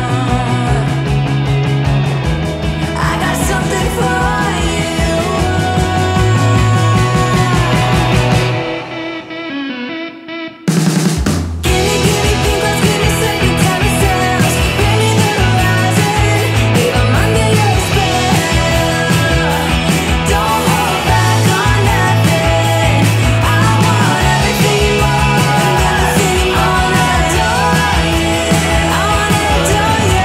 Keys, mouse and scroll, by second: 15.9-16.5 scroll up 1, 16.5-17.2 middle click, 17.3-19.1 scroll up 1, 19.4 scroll down 1, 22.9 scroll up 1, 23.9 click, 27.2 scroll down 1, 28.4-30.2 drag.